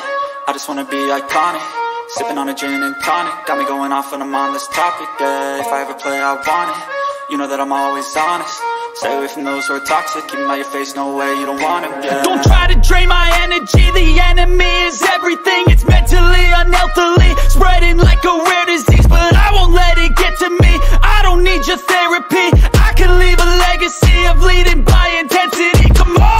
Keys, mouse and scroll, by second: 0.3 ctrl+z, 1.0 right click, 1.6 right click, 2.3 click, 2.9-4.4 drag, 6.8 click, 7.9 ctrl+z, 8.3 click, 10.6 ctrl+z, 11.0 click, 12.9 shift+click, 14.6-15.7 shift+drag, 15.9 g, 16.2 click, 17.4-17.7 drag, 18.8 click, 19.4 ctrl+d, 21.3 click, 22.3-23.7 drag, 25.0-26.2 shift+drag.